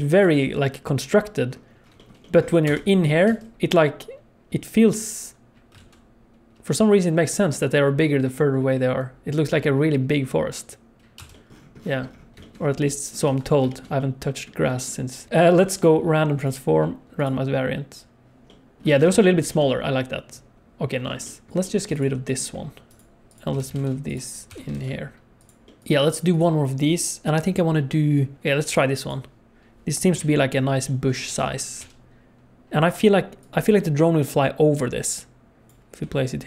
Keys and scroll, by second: 2.6 KP_0, 3.3 space, 5.8 alt+a, 11.2 space, 13.3 ctrl+s, 18.9 alt+a, 19.1 ctrl+s, 21.5 ctrl+s, 21.9 x, 23.5 g, 24.5 g, 30.1 KP_7, 31.8 g, 36.0 g.